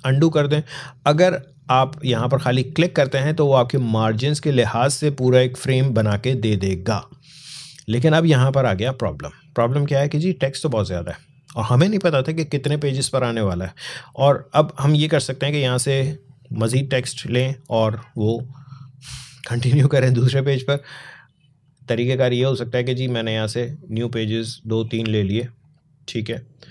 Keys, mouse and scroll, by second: 3.9 click, 5.5 scroll down 1, 21.5 click.